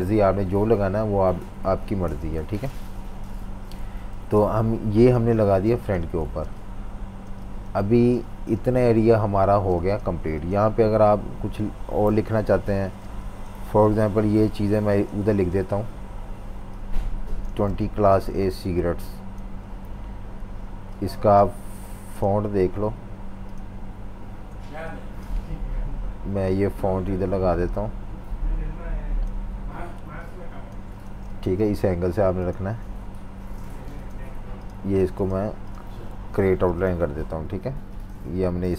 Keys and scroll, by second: 3.2 super+-, 3.4 super+-, 4.1-7.8 typing, 9.5-10.7 typing, 12.0 super+-, 12.8-14.1 typing, 17.5 v, 17.6 space, 18.1 space, 18.5 z, 19.8 v, 31.1 v, 36.3 super+g, 36.4 super+g.